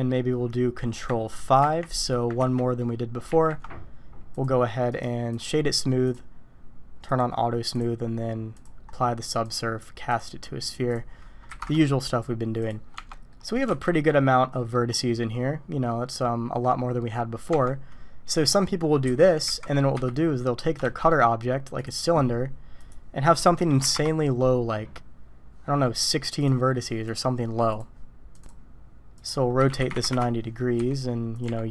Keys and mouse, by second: 0.0 click, 2.4 ctrl+5, 2.4 ctrl+4, 3.3 ctrl+5, 4.4 click, 6.0 click, 7.1 click, 9.6-10.2 drag, 11.1-12.2 drag, 12.9 Tab, 13.3 click, 13.7 alt+a, 14.1 click, 15.9 click, 17.5 Tab, 19.0-20.8 typing, 22.8-24.5 drag, 26.1 click, 27.0 click, 27.7 click, 29.5 r, 30.7 s, 31.4 g.